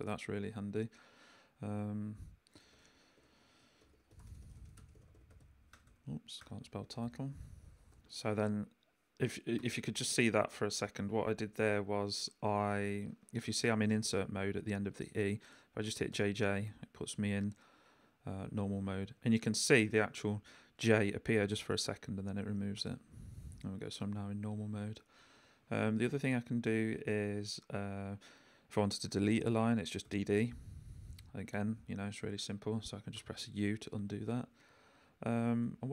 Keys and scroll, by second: 2.4-7.9 typing, 9.6 i, 11.4 Right, 16.1 j, 18.5 j, 19.0 k, 19.9 i, 22.8 j, 25.2 j, 25.6 k, 30.0 d, 33.1 u, 33.8 j.